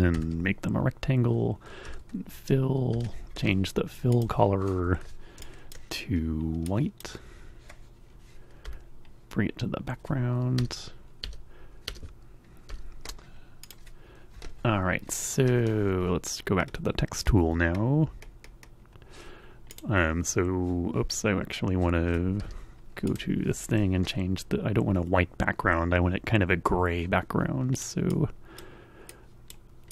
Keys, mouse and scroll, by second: 0.2 shift+r, 0.6 f, 2.4 x, 4.2 click, 5.5 super+click, 6.7 click, 8.6 End, 10.4 Escape, 11.0 Escape, 11.6 Escape, 13.4 click, 19.7 click, 22.2 Escape, 23.1 click, 27.7 click, 28.1 click, 29.1 click, 29.8 click.